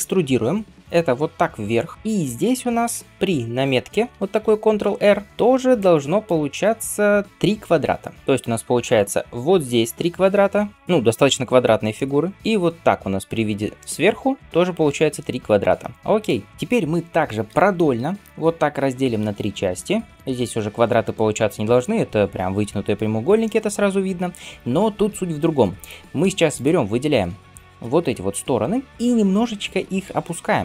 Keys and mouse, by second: 1.5 e, 4.0 ctrl+r, 7.6 1, 8.1-25.7 drag, 17.8 ctrl+r, 25.7-30.6 middle drag, 29.6 g.